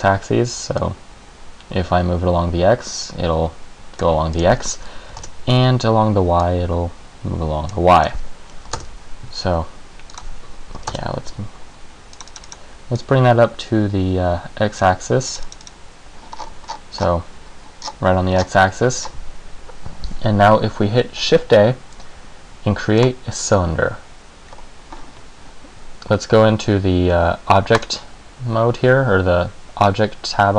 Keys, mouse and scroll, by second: 1.0 click, 4.5 click, 6.6 click, 8.1 click, 10.3 click, 12.3 click, 12.5 click, 12.7 click, 13.1 click, 15.5 click, 15.6 click, 15.8 click, 16.5-17.5 scroll up 16, 18.0-18.5 scroll down 5, 18.5-19.3 scroll down 10, 21.3 shift+a, 24.7-26.3 scroll up 1, 27.9 click.